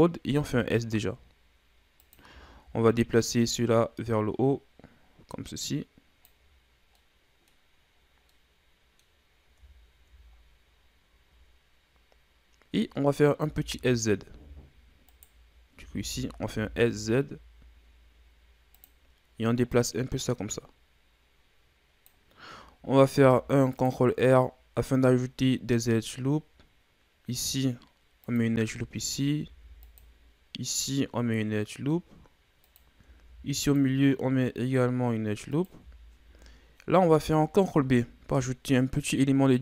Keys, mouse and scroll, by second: 0.3 s, 2.5-3.6 scroll up 2, 3.6-6.6 drag, 12.0-15.0 scroll up 1, 15.2 right click, 15.8 a, 16.0 a, 16.5 s, 19.7-22.7 drag, 23.1 ctrl+r, 29.4 ctrl+r, 33.3 ctrl+r, 36.0 scroll up 2, 37.7 ctrl+b.